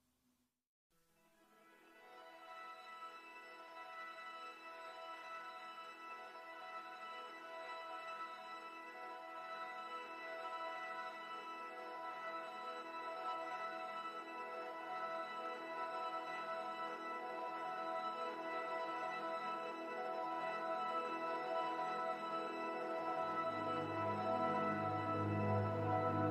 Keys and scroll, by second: 0.6 space, 3.6 space, 5.4 space, 13.4 space, 14.9 Delete, 16.2 space, 20.5 ctrl+z, 26.0 space.